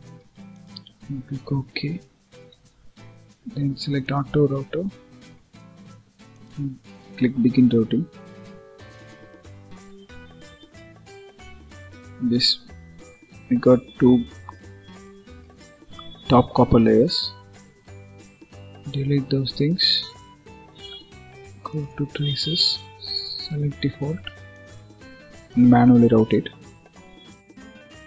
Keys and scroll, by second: 2.4 ctrl+s.